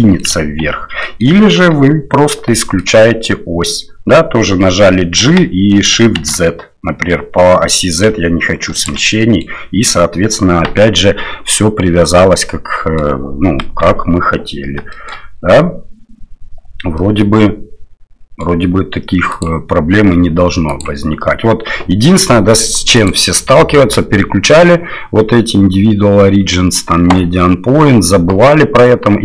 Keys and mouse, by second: 0.6 ctrl+z, 1.0 middle click, 1.5 KP_7, 2.6 shift+click, 5.2 g, 9.1 click, 11.6-13.0 drag, 13.7 KP_7, 14.9 shift+click, 16.9-18.4 middle drag, 19.4 click, 23.1-26.6 drag, 28.4 middle click.